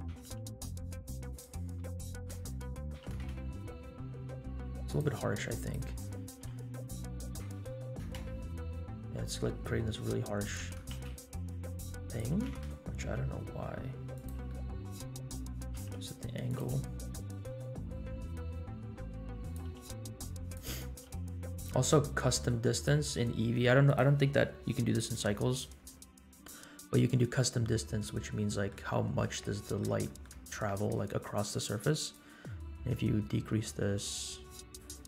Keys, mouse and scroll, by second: 0.1 r, 1.9 shift+middle click, 2.6 scroll up 1, 3.0 g, 5.6-8.3 drag, 7.5 KP_0, 10.6 g, 12.2 g, 14.5 middle click, 15.7 r, 16.6 g, 19.7 r, 22.7 click, 22.7 r, 23.9 click, 28.1 middle click, 29.5-29.8 middle drag, 30.0 shift+middle drag, 32.1-34.9 drag.